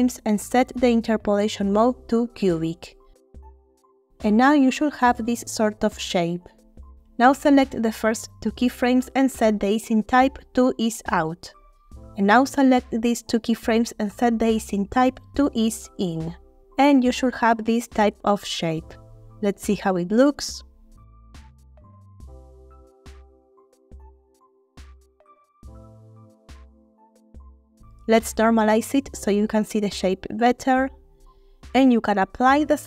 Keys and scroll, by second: 21.0 Home, 24.2 space, 28.3 space.